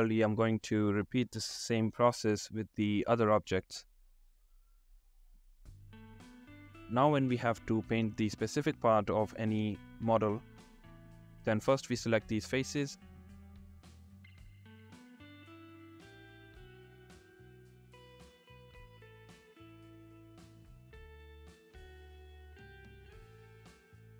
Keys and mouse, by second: 0.0 shift+click, 1.5 click, 4.8 Tab, 5.4 Tab, 6.5 shift+middle click, 6.9 shift+middle click, 9.6 click, 10.2 click, 12.7 ctrl+click, 13.5 shift+click, 14.3 ctrl+click, 14.7 middle click, 15.7 shift+click, 18.9 shift+click, 19.2 shift+click, 19.8 middle click, 20.9 shift+click, 21.2 middle click, 21.3 shift+click, 21.4 shift+middle click, 24.0-24.1 drag.